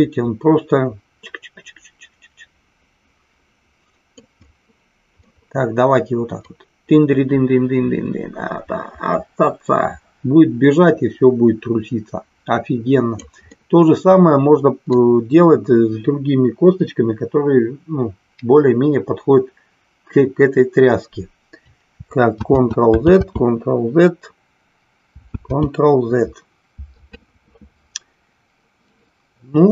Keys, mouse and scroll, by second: 4.5-5.1 middle drag, 6.5-13.1 drag, 13.5-14.9 middle drag, 22.4 ctrl+z, 25.4 ctrl+z.